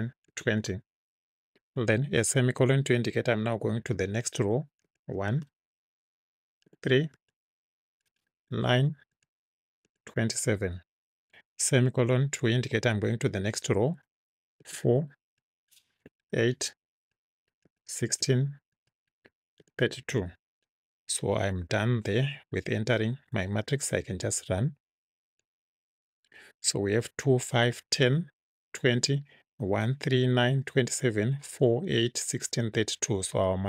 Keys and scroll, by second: 0.3 2, 0.6 0, 3.4 ;, 4.9 1, 5.3 space, 6.7 3, 7.2 space, 8.5 9, 9.2 space, 9.9 2, 10.4 7, 11.8 ;, 14.7-20.2 typing, 21.4 Right.